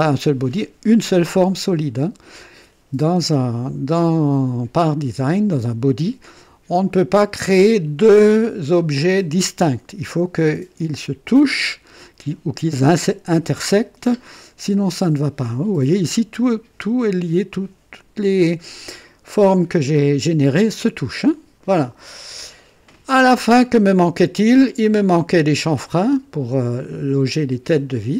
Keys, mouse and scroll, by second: 22.1 scroll down 2, 23.4-24.8 drag.